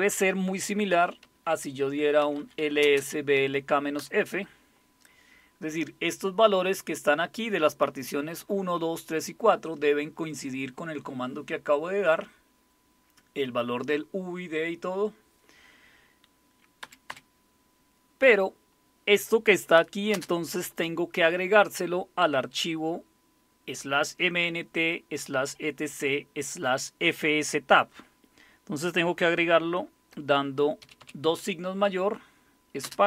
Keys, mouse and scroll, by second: 0.7-3.8 typing, 4.0 Return, 16.8 Up, 17.1 typing, 20.1 space, 30.8 typing, 32.8-33.0 typing.